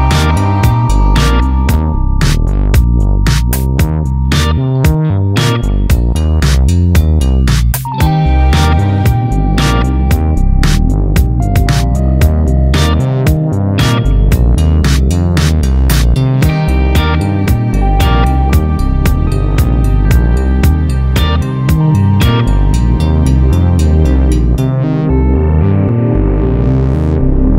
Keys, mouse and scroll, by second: 1.1-4.8 drag, 5.3 x, 6.0 `, 6.4 Tab, 6.7 `, 9.3-16.3 drag, 12.3 `, 16.3 Tab, 16.5 `, 17.9 `, 18.7 click, 18.9 `, 19.5 click, 20.1 Tab, 20.1-20.5 scroll down 2, 21.0-25.3 typing, 21.2 click, 21.9 click, 22.8 scroll up 1, 23.3 scroll down 1, 23.7 Tab, 24.3-24.7 scroll down 2, 26.9 alt+a.